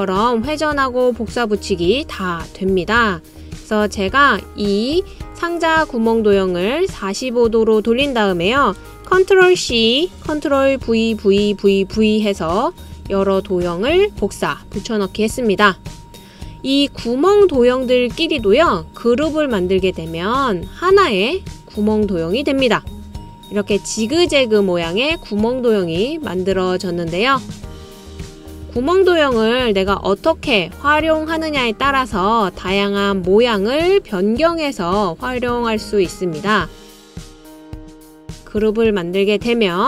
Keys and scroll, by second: 10.6 super+c, 11.8 super+v, 12.2 super+v, 12.9 super+v.